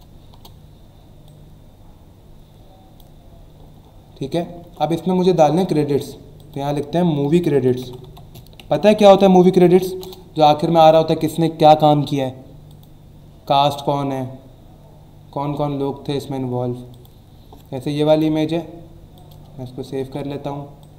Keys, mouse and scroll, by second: 0.3 Return, 1.2 click, 3.8 alt+scroll up 1, 4.6 Tab, 6.4 click, 7.0-10.4 typing, 12.7 click, 15.9 scroll down 1, 16.9 click, 18.1 right click, 19.2 click, 19.8 Return, 20.8 click.